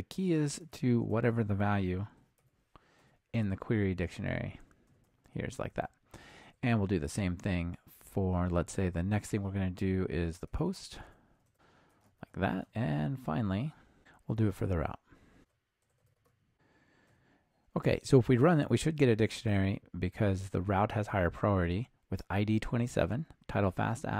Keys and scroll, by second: 1.1 Return, 5.8 super+d, 10.5 ctrl+alt+shift+Left, 11.1 Return, 11.5 super+c, 12.1 super+v, 15.4 super+c, 16.1 ctrl+alt+shift+Right, 16.2 super+v.